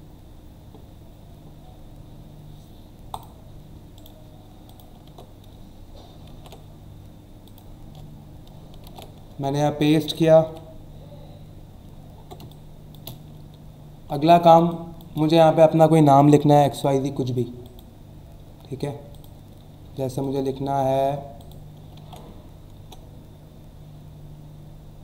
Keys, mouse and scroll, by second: 3.1 click, 4.0 right click, 4.7 click, 5.0 alt+Tab, 6.3 ctrl+n, 7.4 click, 9.4 alt+scroll down 1, 10.5 v, 11.9 alt+scroll up 1, 12.4 space, 12.5 click, 12.9 space, 14.3 alt+scroll up 1, 14.6 space, 14.7 click, 15.1 space, 16.7 click, 17.6 click, 19.1 click, 20.2 click, 21.4 click, 22.0 ctrl+a.